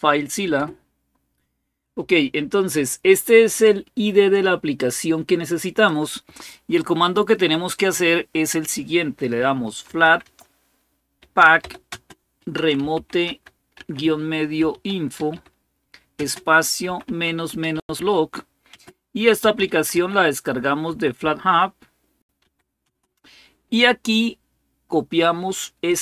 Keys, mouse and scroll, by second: 0.4 Return, 0.4-1.2 typing, 5.6 click, 9.2-20.9 typing, 22.1-22.6 typing.